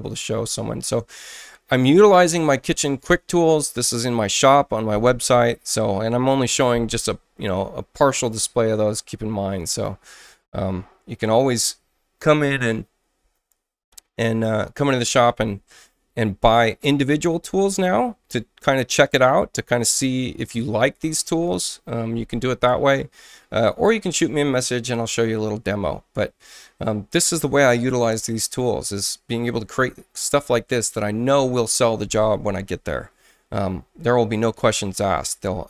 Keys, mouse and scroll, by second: 9.2 space, 9.6 click.